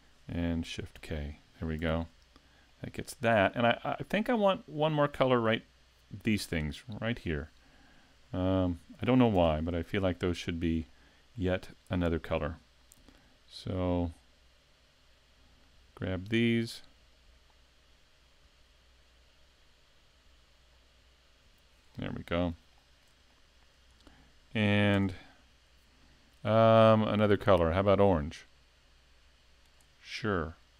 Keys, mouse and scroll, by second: 0.9 shift+k, 1.8 a, 2.7 middle click, 3.9 shift+middle click, 4.3 scroll up 2, 4.8 shift+middle click, 5.2-5.6 scroll up 1, 9.4 Tab, 10.1 shift+middle click, 10.5-10.9 scroll up 1, 10.9 shift+middle click, 13.0 l, 14.0 l, 15.7 l, 17.2 l, 18.4 l, 20.3 l, 20.7 scroll up 3, 21.4 l, 21.8 scroll down 4, 22.7 shift+middle click, 23.3 middle click, 23.6 l, 23.9 scroll down 2, 24.9 Tab, 27.4 click.